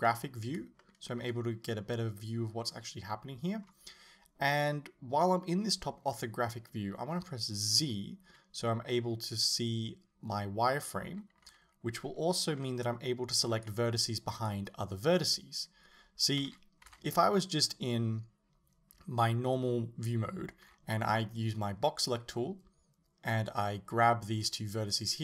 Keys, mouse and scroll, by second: 0.2-0.8 scroll up 1, 0.8-2.8 shift+middle drag, 3.7-7.7 scroll down 1, 7.9 z, 11.6 a, 16.5 z, 16.9 a, 20.7 b.